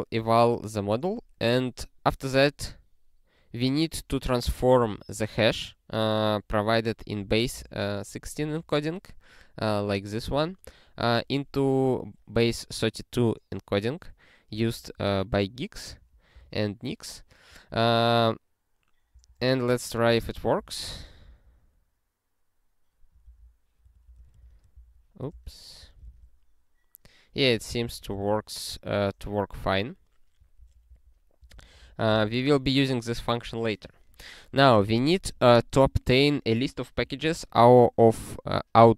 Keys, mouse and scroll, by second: 8.4 ctrl+e, 10.3 ctrl+n, 14.5 ctrl+n, 14.7 ctrl+n, 14.9 ctrl+n, 16.5 ctrl+e, 19.1 ctrl+n, 19.3 ctrl+n, 19.6 ctrl+n, 20.1 ctrl+space, 20.1 ctrl+p, 20.3 ctrl+p, 20.6 alt+;, 21.2 ctrl+n, 23.2 ctrl+alt+k, 23.8-25.6 typing, 25.3 ctrl+b, 25.8 ctrl+e, 27.6 alt+^, 28.3 ctrl+s, 30.6 ctrl+a, 30.8 ctrl+e, 31.4 ctrl+space, 31.5 ctrl+a, 31.8 alt+;, 32.2 ctrl+s, 35.2 click.